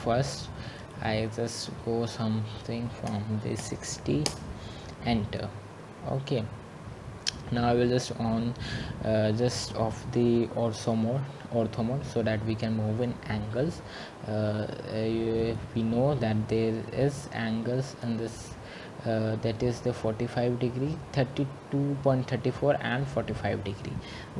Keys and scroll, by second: 4.3-5.0 typing.